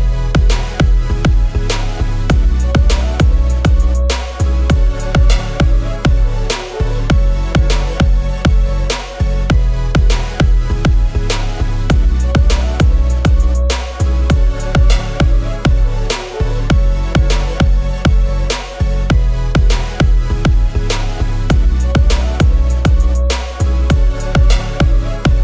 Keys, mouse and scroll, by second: 4.6-5.5 typing, 6.5-7.0 typing, 15.5-16.1 typing, 17.8 Return, 18.2-19.4 typing, 20.1 Return, 20.6-22.2 typing, 24.2 alt+Down, 24.6 alt+Down, 24.6 alt+Down, 24.8 alt+Down.